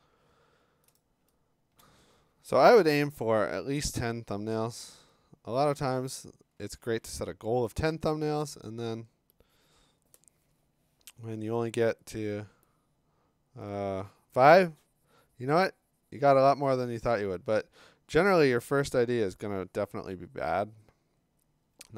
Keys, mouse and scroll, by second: 1.0 click, 1.6 middle click, 1.6 scroll, 1.8-2.3 click, 1.9 middle click, 3.8 ctrl+d, 6.9 ctrl+d, 7.7 b, 12.1 click, 12.4 click, 12.7-13.3 click, 13.5 click.